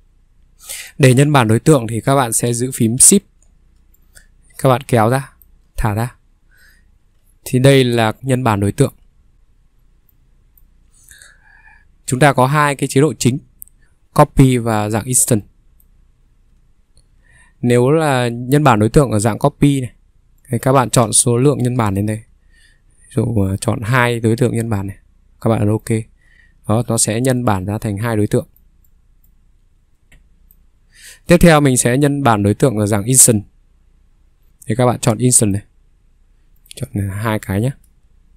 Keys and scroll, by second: 1.1 Escape, 3.0 s, 7.1 s, 8.2 ctrl+3, 11.1 ctrl+3, 11.1 Escape, 12.1 Escape, 12.5 ctrl+3, 17.2 Escape, 17.3 Escape, 21.0 Escape, 21.1 ctrl+3, 22.3 Escape, 26.7 Escape, 26.9 ctrl+3.